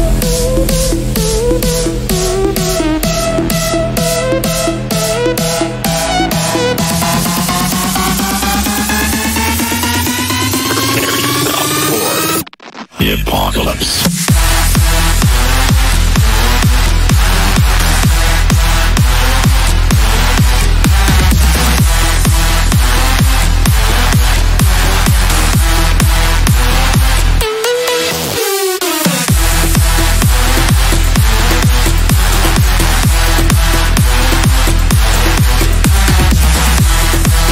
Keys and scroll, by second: 2.1 shift+F2, 14.3 c, 14.6 e, 24.2 F3.